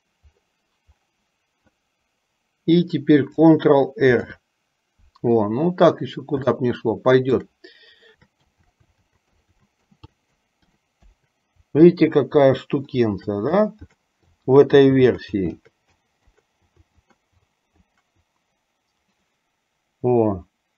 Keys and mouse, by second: 4.5 ctrl+r, 6.6 shift+middle click, 8.1-10.6 typing, 13.2-17.8 typing.